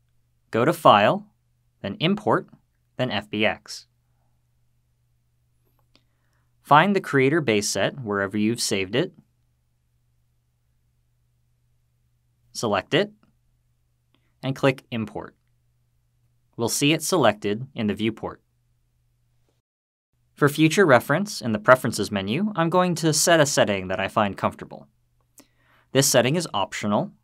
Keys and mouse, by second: 0.7-4.0 drag, 18.3-19.1 middle drag.